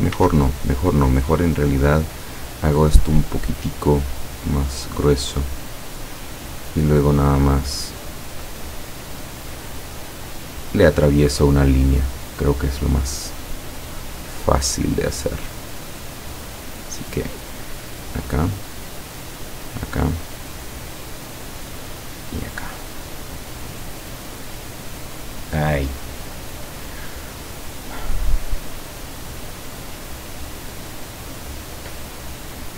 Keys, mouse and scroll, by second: 1.5 click, 2.6 click, 3.9 click, 5.4 click, 7.6-9.4 drag, 10.7 click, 16.7 click, 19.2 click, 20.6 click, 24.0 click, 30.2 click.